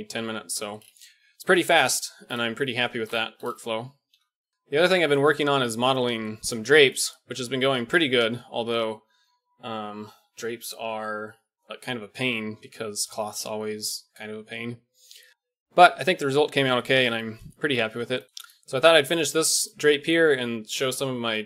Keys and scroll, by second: 3.0 a, 4.1 KP_1, 18.2 KP_5.